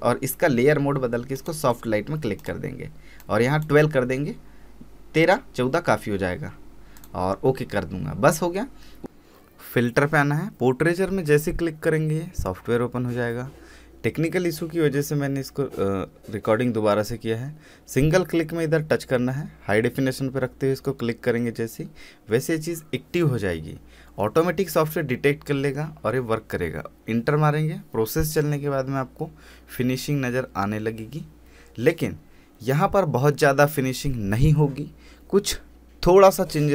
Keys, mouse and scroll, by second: 1.3-6.5 drag, 6.5-6.9 scroll up 1, 6.9 click, 10.5 click, 18.0 click, 19.6-20.5 scroll up 1, 20.5-22.4 drag, 27.8 click, 31.1 click.